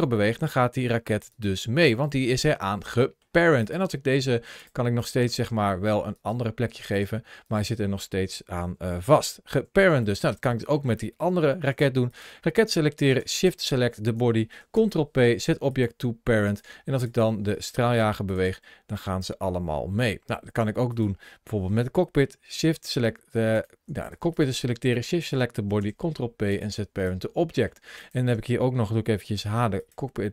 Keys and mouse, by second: 1.2 right click, 1.8 middle click, 2.9 middle click, 3.5 right click, 3.7 g, 4.4 click, 5.1 g, 6.0 right click, 6.9 g, 7.3 right click, 8.6 ctrl+z, 9.0 ctrl+z, 9.4 ctrl+z, 9.8 middle click, 11.4 shift+middle click, 11.9 click, 14.6 ctrl+p, 16.8 click, 18.1 click, 18.3 g, 18.9 click, 19.9 middle click, 20.8 click, 23.4 shift+click, 23.9 click, 24.2 click, 25.7 ctrl+p, 27.4 middle click, 29.2 h, 29.7 click, 30.2 middle click.